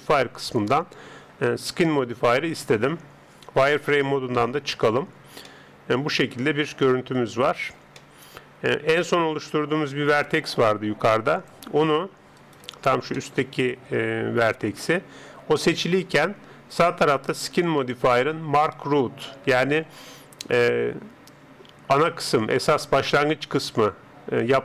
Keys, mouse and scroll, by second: 4.3 z, 5.1-7.5 middle drag, 8.0-10.4 middle drag, 11.4 click, 12.4 right click, 13.2-15.4 middle drag.